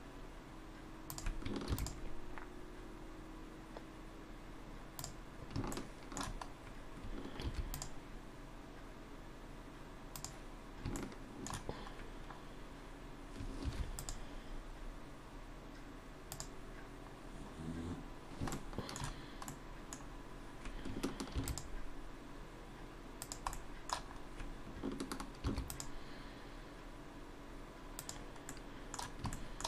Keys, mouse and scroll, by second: 1.7 ctrl+r, 5.7 shift+middle click, 6.5 scroll up 1, 7.4 ctrl+r, 11.0 shift+middle click, 12.1 scroll up 1, 13.7 ctrl+r, 17.2-17.9 scroll down 1, 17.9 scroll down 1, 18.5 shift+middle click, 19.2-19.5 scroll down 1, 19.5 middle click, 20.0-20.9 scroll down 3, 21.3 ctrl+r, 23.5 middle click, 24.1-24.8 scroll up 2, 25.5 ctrl+r, 28.5 middle click, 29.3 shift+middle click.